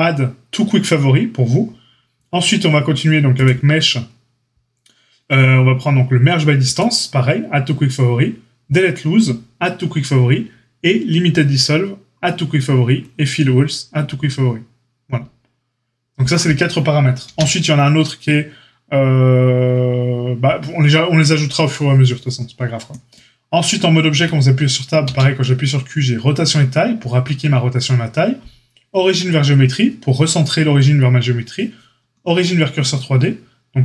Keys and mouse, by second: 17.3 q, 24.1 Tab, 25.0 q.